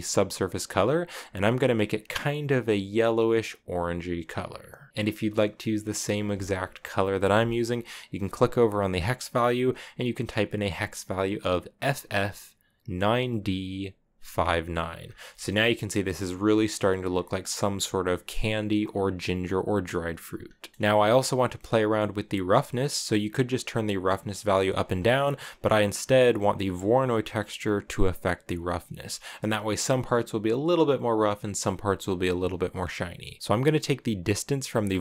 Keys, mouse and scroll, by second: 4.9-5.8 scroll down 5, 6.9 click, 14.8 scroll down 2, 14.8 scroll up 1, 15.0-16.5 shift+middle drag, 16.5-17.6 scroll down 1, 17.6 scroll down 1, 19.0 middle click, 20.2-20.7 scroll down 7, 20.7 scroll up 2, 21.7-24.6 drag, 25.0 middle click, 25.1-26.1 scroll down 2, 26.1 click, 28.7-29.7 scroll up 1, 29.7 scroll up 1.